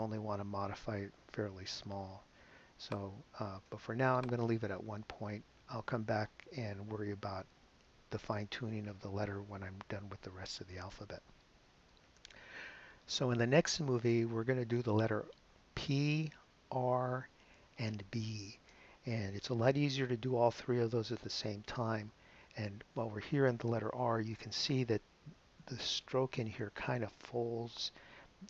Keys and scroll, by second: 5.0 i, 5.8 Return.